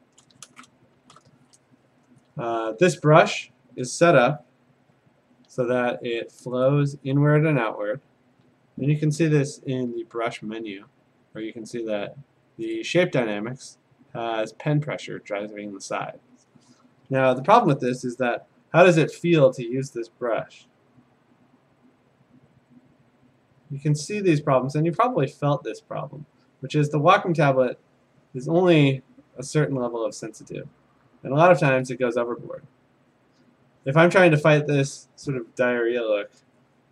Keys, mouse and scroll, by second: 0.2 scroll, 0.3 click, 1.0 ctrl+shift+n, 1.4 Return, 4.9 F5, 6.7 right click, 8.8 Escape, 9.4 F5, 9.9 F5, 12.9 click, 13.9 click, 15.9 F5, 18.3-19.6 typing, 22.7-25.8 drag, 26.4-29.5 drag, 32.7 click, 33.9 click.